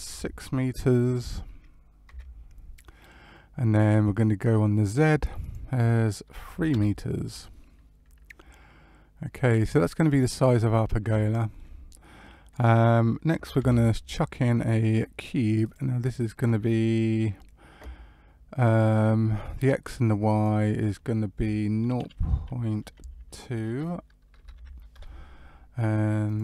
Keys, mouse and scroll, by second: 5.3 click, 8.5 middle click, 10.1-10.5 scroll up 2, 10.5 middle click, 11.1 shift+middle click, 12.2 middle click, 13.5 shift+a, 20.2 click, 24.3 BackSpace, 26.2 click.